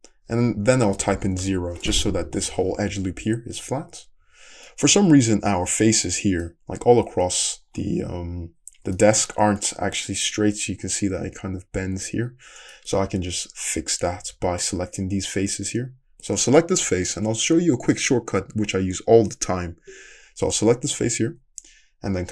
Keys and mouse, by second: 7.7-14.6 middle drag, 8.1 `, 14.3 3, 14.6-17.4 drag, 17.4-22.3 middle drag.